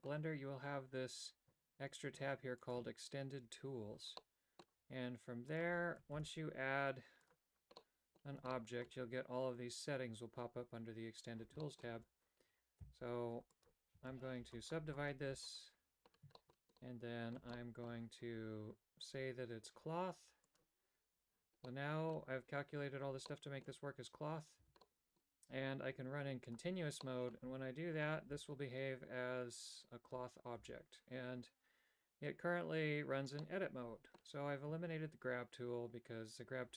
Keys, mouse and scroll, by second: 4.2 middle click, 5.5 click, 6.2 shift+a, 7.8 middle click, 8.6 shift+middle click, 11.6 middle click, 12.0 Tab, 12.8 w, 14.0 w, 14.4 w, 14.8 w, 15.3 w, 16.4 shift+middle click, 16.8 middle click, 17.6 shift+middle click, 20.8 click, 21.7 middle click, 23.3 middle click, 24.8 a, 24.9 middle click, 26.5 click, 27.1 middle click, 28.4 g, 30.7 a, 33.5 middle click.